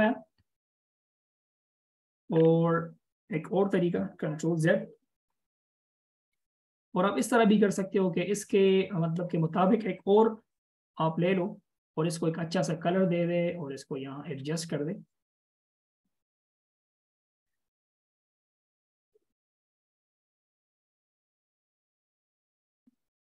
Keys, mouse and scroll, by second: 2.5-4.3 scroll down 1, 15.5 double click, 22.1 alt+shift+click.